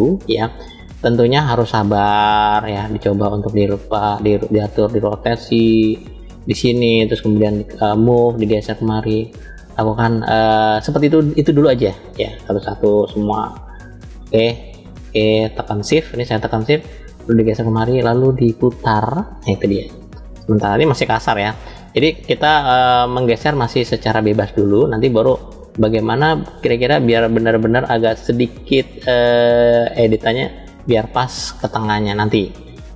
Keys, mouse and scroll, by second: 0.8 click, 1.7 shift+click, 4.1 click, 5.2 click, 5.4 click, 7.3 click, 8.4-10.1 drag, 11.2 click, 12.1 shift+click, 13.2 shift+click, 14.6 shift+click, 15.5 shift+click, 16.8 click, 17.0 click, 19.1 click, 20.4 click, 22.0 click, 23.0-24.7 drag, 25.4 click, 26.3 shift+click, 27.7 shift+click, 29.0-30.8 drag, 32.3 click.